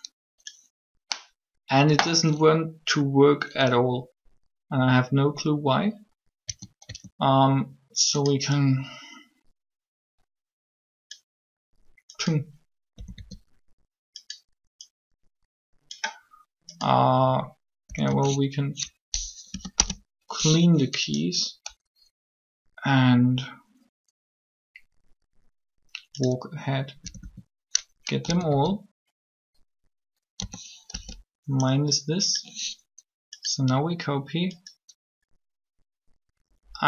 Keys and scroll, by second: 6.3 a, 6.8 a, 12.9 a, 13.0 a, 17.8 a, 18.0 a, 19.5 Delete, 19.7 Return, 26.9 a, 27.0 a, 28.2 a, 28.5 a, 30.4 a, 30.9 b.